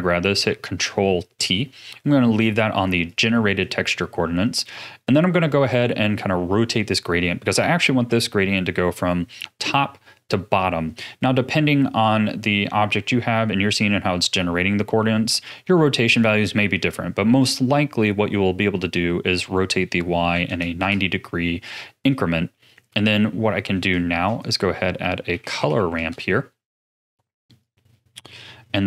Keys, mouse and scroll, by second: 0.2 ctrl+t, 0.9-1.6 middle drag, 1.6 scroll up 5, 2.7 click, 3.0 click, 4.5-7.5 middle drag, 18.8-21.8 drag, 22.5 middle click, 23.0-23.4 scroll down 3, 23.4 middle click, 24.1 shift+a, 28.6-28.8 middle drag.